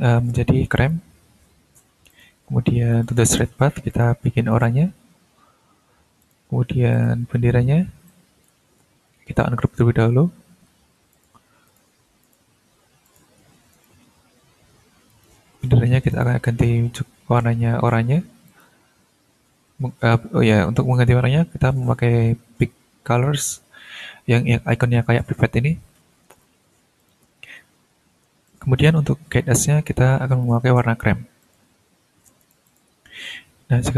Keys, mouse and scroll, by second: 0.7 click, 2.1 click, 2.9 click, 3.9 click, 4.5 click, 6.2 click, 6.9 click, 7.5 ctrl+scroll up 2, 8.1 ctrl+click, 8.6 ctrl+z, 10.6 ctrl+u, 11.1 ctrl+click, 11.6 ctrl+shift+click, 12.2 shift+click, 13.0 shift+click, 13.7 shift+right click, 15.1 click, 16.1 click, 16.5-17.2 scroll down 1, 18.5 click, 27.0 click, 27.4-28.2 scroll up 2, 28.4 ctrl+click, 30.4 click, 31.4 click, 32.4-32.9 drag, 33.0-33.9 ctrl+scroll down 2.